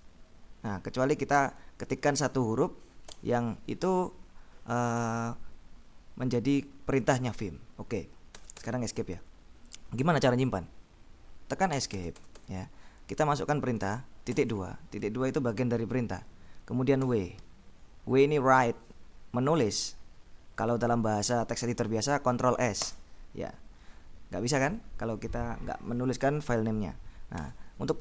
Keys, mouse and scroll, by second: 0.0-1.4 typing, 3.2 BackSpace, 8.4 Escape, 11.8 Escape, 14.4 shift+;, 17.1 w, 22.9 Return, 27.5 Escape.